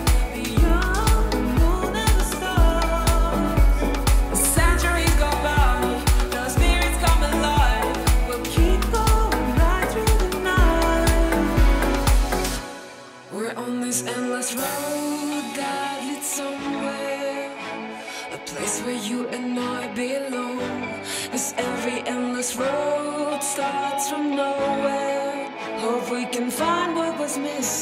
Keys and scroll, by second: 0.5 space, 0.9 space, 1.7 space, 2.7 space, 5.9 space, 6.7 shift+space, 8.8 super+s, 9.3 space, 10.5 space, 12.8 super+z, 16.2 space, 16.9 space, 19.5 space, 20.9 super+s, 21.3 space, 22.2 space, 27.2 super+z.